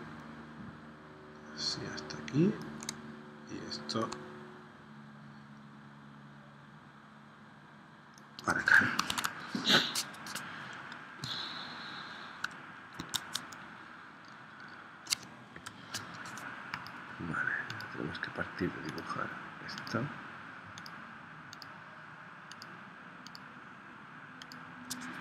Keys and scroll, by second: 9.1 super+Tab, 13.0 super+Tab, 15.5 p.